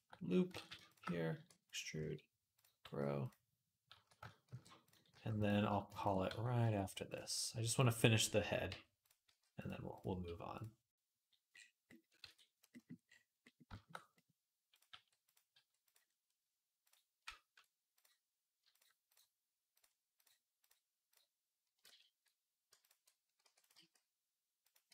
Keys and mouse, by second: 0.4 ctrl+z, 1.2 e, 1.8 s, 2.6 g, 3.7 a, 4.3 shift+n, 4.9 g, 5.8 ctrl+click, 6.1 f, 7.1 ctrl+middle click, 7.5 ctrl+click, 7.6-8.8 middle drag, 8.5 f, 8.8 click, 8.9 middle click, 9.0 g, 9.7 click, 9.8-13.7 middle drag, 9.9 g, 12.6 ctrl+s, 14.7 g, 15.4 g, 16.6 click, 17.7 click, 17.7-21.8 middle drag, 20.0 ctrl+click, 20.4 ctrl+click, 21.7 ctrl+z, 23.2 e, 23.6 s.